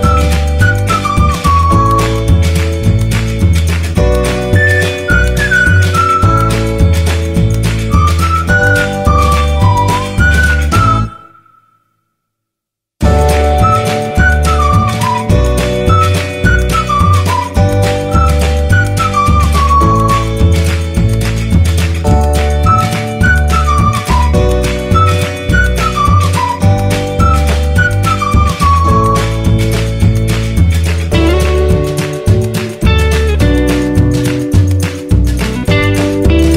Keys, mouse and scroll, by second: 11.0 Return, 17.9 click.